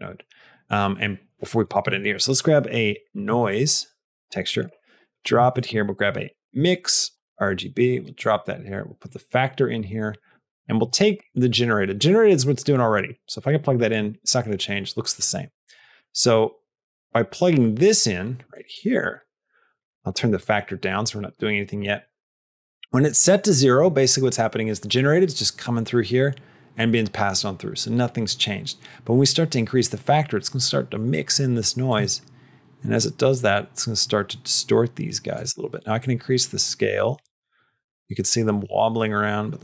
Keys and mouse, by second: 1.5 shift+click, 1.7 shift+a, 5.2 click, 5.5 shift+a, 8.9 click, 10.7 click, 11.3-12.8 drag, 13.2 click, 15.6 click, 16.7-18.6 drag, 18.9 click, 19.7 click, 21.1 click, 21.9 click, 31.7-35.2 shift+drag, 35.9-39.6 drag.